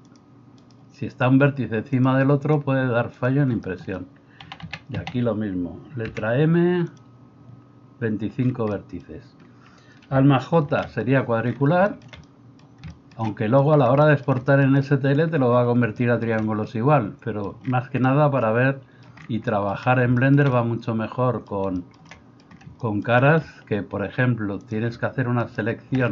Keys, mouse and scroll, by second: 0.6-3.6 right drag, 4.4 a, 4.7 a, 6.0 m, 10.6 alt+j, 25.4 alt+middle click, 25.4 alt+right click.